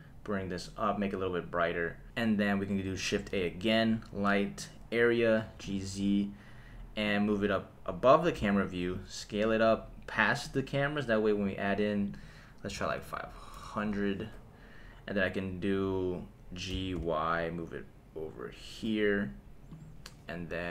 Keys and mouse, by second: 3.1 shift+a, 5.4 g, 5.6 z, 7.0 click, 8.3 s, 10.4 click, 12.1-13.8 drag, 12.9 KP_0, 13.0 KP_0, 15.7 click, 16.7 g, 17.0 y, 19.7 click.